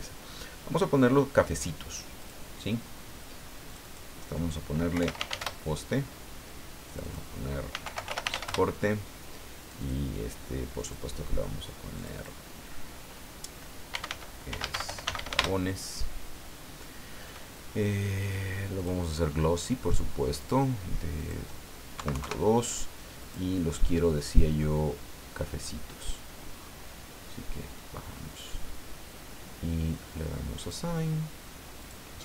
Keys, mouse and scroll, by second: 2.2 click, 3.7 click, 4.7-5.8 typing, 6.9 click, 7.5-8.7 typing, 9.6 click, 10.8 click, 12.0 click, 13.7-15.8 typing, 18.8 click, 20.4 click, 21.2 click, 21.9 KP_Decimal, 22.1 KP_2, 22.2 KP_Enter, 23.2 click, 24.3-26.2 drag, 26.6-26.9 scroll down 2, 27.1 scroll down 2, 28.4 scroll up 2, 30.6 click, 31.8 click.